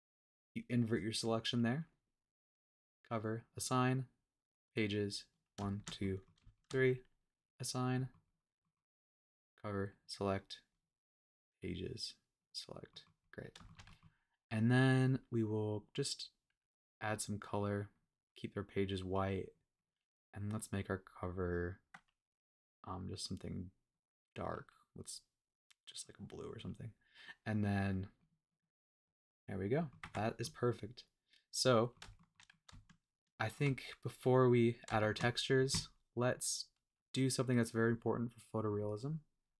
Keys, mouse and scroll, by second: 2.5 click, 3.4 click, 4.6 click, 5.3 click, 5.7 shift+click, 6.0 middle click, 6.5 shift+click, 7.4 click, 7.9 middle click, 8.3 click, 8.6 middle click, 9.2 click, 9.9 click, 10.7 click, 11.3 click, 11.6 click, 12.4 drag, 12.9 middle click, 13.2 click, 13.6 shift+middle click, 13.9 middle click, 14.9 click, 15.7 click, 19.9 click, 20.4 click, 21.5 click, 24.5 click, 28.2 click, 28.6 click, 29.2 middle click, 30.0 Tab, 30.4-32.0 middle drag, 32.2 shift+middle click, 32.5 middle click, 32.9-33.7 shift+middle drag, 34.4-34.7 scroll up 1, 34.7 scroll down 1, 35.0 shift+middle click, 35.3-35.9 scroll up 1, 36.1-37.5 scroll down 1, 37.6 click, 38.7-39.5 drag.